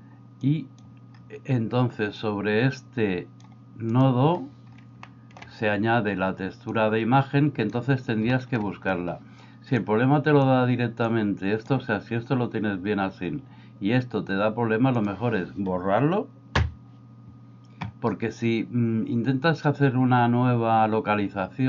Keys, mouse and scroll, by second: 0.5 click, 2.3-3.4 drag, 4.0 drag, 5.3 middle click, 6.8 click, 8.4 shift+middle click, 10.0 click, 11.1 click, 15.0 click, 16.7 x.